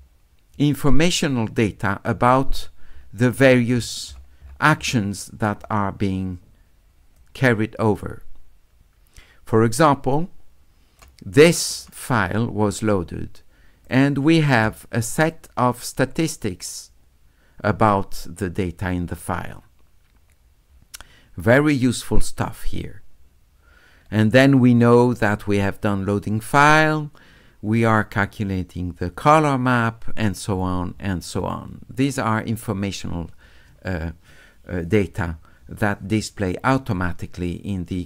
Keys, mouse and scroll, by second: 0.0 middle click, 0.0 scroll up 2, 0.6 middle click, 0.6-1.3 scroll up 2, 1.6 middle click, 2.2 middle click, 2.6 middle click, 3.0 middle click, 3.8 middle click, 4.1 middle click, 4.4 middle click, 7.2-11.0 drag, 11.7 click, 17.2 middle click, 19.0 middle click, 23.6 middle click, 23.8 middle click, 24.7 middle click, 29.4-31.5 scroll up 2, 31.5-31.8 scroll up 1.